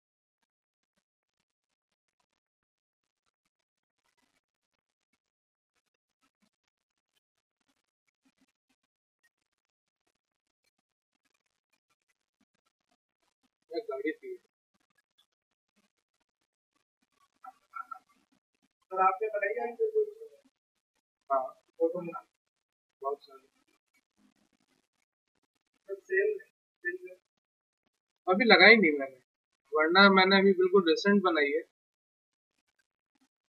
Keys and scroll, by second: 12.0 ctrl+w, 31.6-32.8 typing.